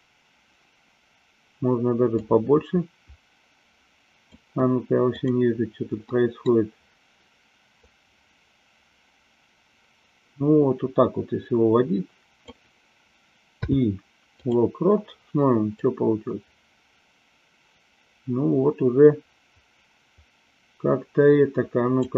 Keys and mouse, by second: 2.2-4.3 drag, 5.1 click, 6.0-6.4 middle drag, 7.8-12.4 drag, 15.8-22.1 drag.